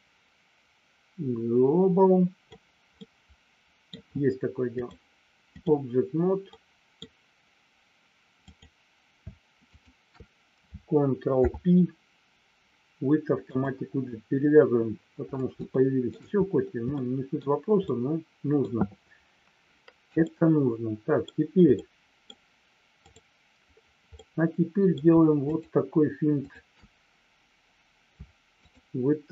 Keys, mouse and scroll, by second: 3.0 middle click, 4.8-5.8 drag, 6.5 middle click, 8.4 click, 9.7 shift+click, 11.3 ctrl+p, 15.7 shift+middle click, 16.9 middle click, 17.8 middle click, 20.3 middle click, 21.8 middle click, 24.1 middle click, 25.4 shift+click, 28.7 shift+click, 29.1 shift+click.